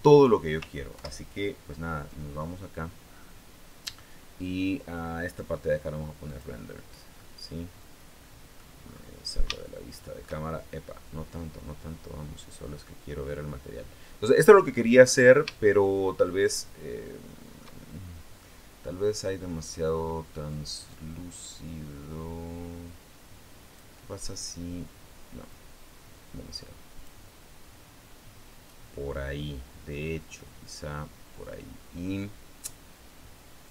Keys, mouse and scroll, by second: 0.7 ctrl+Left, 5.0 click, 6.0 click, 6.9-8.5 middle drag, 8.5-9.2 scroll up 2, 9.2 scroll up 1, 9.3 shift+click, 9.5 shift+middle click, 10.1-11.4 shift+scroll down 1, 11.4-12.8 middle drag, 12.8-13.2 scroll down 1, 14.6 scroll up 1, 15.4-17.5 shift+middle drag, 20.3-23.7 drag, 25.3-27.1 drag, 33.4-33.7 drag.